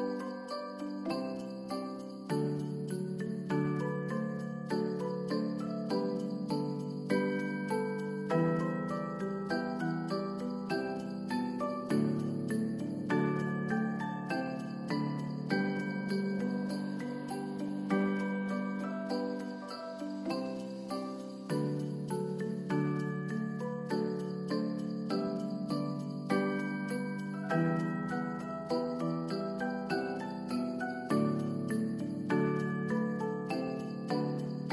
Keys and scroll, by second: 1.3 ctrl+s, 33.5 s.